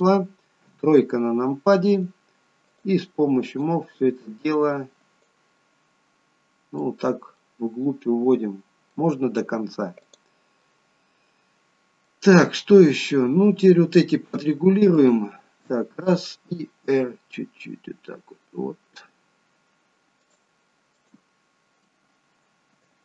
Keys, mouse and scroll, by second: 0.7 KP_3, 2.8 click, 3.6 click, 5.6 middle click, 7.0-8.8 scroll down 3, 7.4 middle click, 10.1 click, 10.7 middle click, 12.4-12.9 scroll up 2, 15.0 alt+shift+click, 17.0 r, 21.0 click.